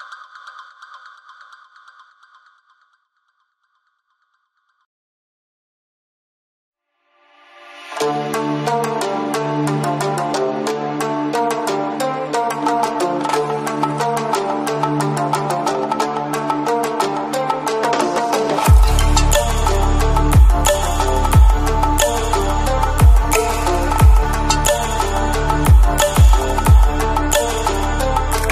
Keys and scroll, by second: 0.2 Return, 2.9 Escape, 3.9 Escape, 26.4 alt+7, 28.0 alt+a.